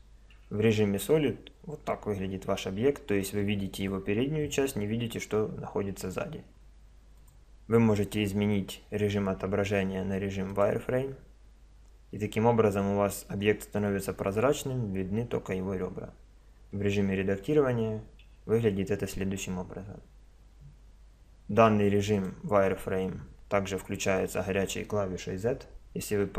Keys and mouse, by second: 0.5 Tab, 1.1 middle click, 2.0 click, 2.6 middle click, 8.8 click, 12.2-14.4 middle drag, 16.8 Tab, 18.3 a, 22.2-23.7 drag, 23.8 click, 24.0 click.